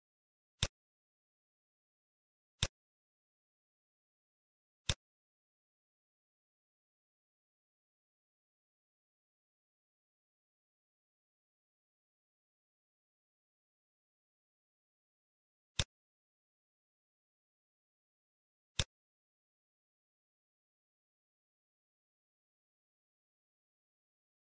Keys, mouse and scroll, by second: 3.0 scroll up 2, 3.6 scroll up 4, 3.8 shift+middle click, 5.1 shift+click, 7.5 scroll down 6, 8.4 middle click, 8.4-9.0 scroll down 4, 9.4 middle click, 9.7 scroll up 8, 10.2 middle click, 10.6 scroll up 2, 12.6-13.1 scroll down 6, 13.2 middle click, 13.5-14.3 scroll up 4, 13.9 middle click, 15.7 shift+click, 19.8 scroll down 2, 20.7-21.3 scroll down 4, 21.8 scroll down 2, 22.2 middle click, 22.7 scroll down 3, 23.1 middle click, 23.4-24.1 scroll up 9, 24.3 middle click.